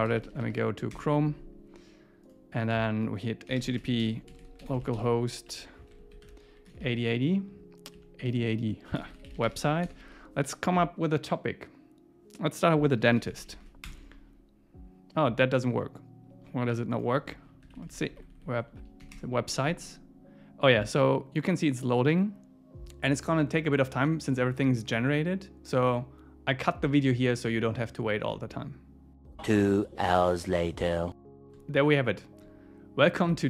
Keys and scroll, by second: 0.9 Return, 5.5 Right, 6.1 alt+shift+Left, 7.9 Down, 8.3 Up, 13.9 Return, 17.7 Right, 17.8 Left, 18.5 Left, 19.1 Return.